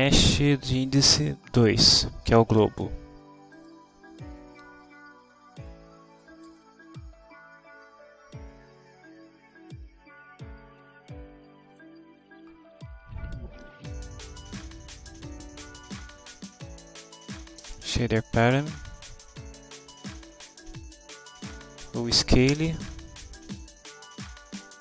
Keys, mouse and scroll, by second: 1.6 2, 3.6 click, 4.9 ., 6.2-7.5 typing, 13.9 Down, 15.3 Down, 17.6 Return, 21.0 Down, 21.8 Up, 22.6 Return.